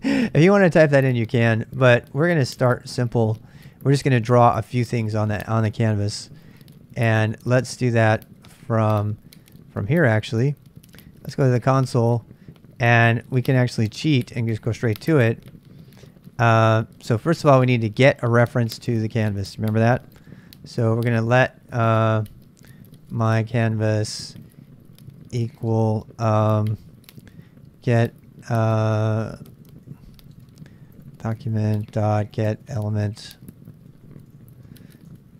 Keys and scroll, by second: 5.4 super+Tab, 7.7 super+Tab, 13.5 super+Tab, 18.4 super+Tab, 19.8-20.7 typing, 22.7-25.7 typing, 26.9-35.3 typing.